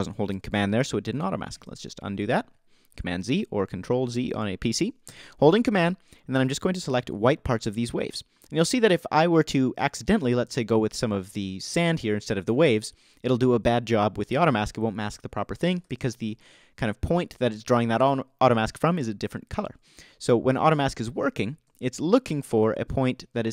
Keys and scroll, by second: 2.5 super+z, 16.9 super+z.